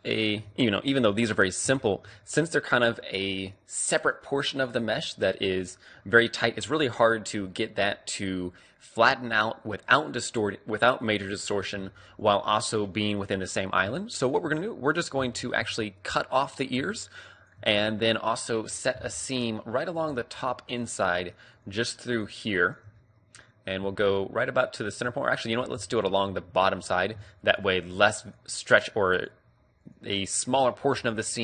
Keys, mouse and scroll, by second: 0.3 right click, 5.3-10.9 drag, 14.2 right click, 14.7-19.1 middle drag, 21.1-23.0 right drag, 23.0-24.5 middle drag, 25.8 b, 27.5-30.7 right drag, 30.7-31.4 middle drag.